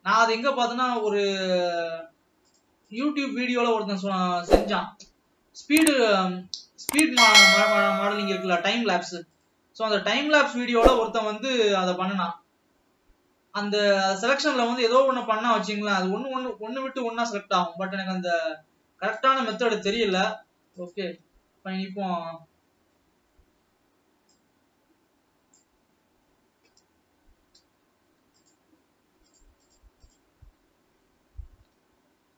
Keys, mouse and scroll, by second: 0.6-1.0 shift+drag, 1.3 shift+drag, 2.8 shift+click, 3.2 shift+drag, 4.8 shift+click, 5.3-5.7 scroll up 2, 6.0 scroll down 1, 6.5-8.6 middle drag, 8.8 shift+drag, 9.7-10.1 shift+drag, 10.9 shift+click, 11.1 shift+click, 11.8-12.2 shift+drag, 12.7-16.5 shift+middle drag, 16.5 shift+click, 16.8-17.4 scroll down 2, 17.4-21.1 middle drag, 21.1 shift+click, 22.1 scroll down 1, 22.3-23.7 middle drag, 23.7 scroll up 2, 24.7-26.3 drag, 26.3 scroll up 3, 28.8 shift+click, 29.8 shift+click.